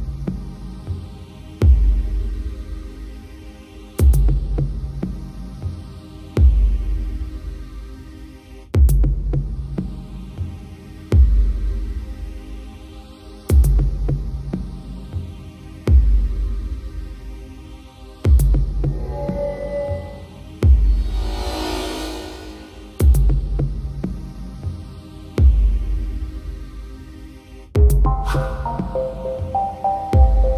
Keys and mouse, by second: 0.8 right click, 1.2 b, 3.2 right click, 3.9 right click, 4.2 right click, 4.9 right click, 5.6 right click, 8.4 right click, 9.2 right click, 9.5 b, 10.7 right click, 11.4 right click, 12.2 right click, 12.8 right click, 13.2 right click, 13.4 b, 14.7 right click, 15.0 right click, 15.2 right click, 15.8 right click, 16.8 right click, 17.0 right click, 17.2 right click, 17.5 right click, 18.2 right click, 18.5 right click, 19.4 right click, 19.8 right click, 20.2 right click, 20.6 right click, 20.9 right click, 21.2 right click, 21.5 right click, 22.0 right click, 22.8 right click, 23.6 right click, 24.0 right click, 24.2 right click, 24.4 right click, 24.8 right click, 25.0 right click, 25.7 right click, 26.0 right click, 26.6 right click, 26.9 right click, 27.7 right click, 28.5 right click, 29.3 right click, 29.7 right click, 29.9 right click, 30.2 right click.